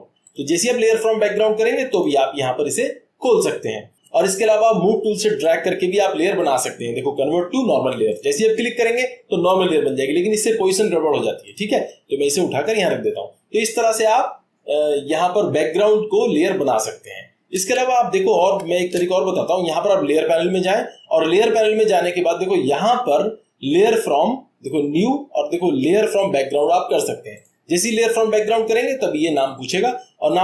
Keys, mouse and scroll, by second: 1.0 click, 2.0-3.1 drag, 5.6-6.7 drag, 8.1-9.2 drag, 12.6-13.7 drag, 17.5 click, 17.8 ctrl+z, 18.3 ctrl+z, 20.5-28.2 drag.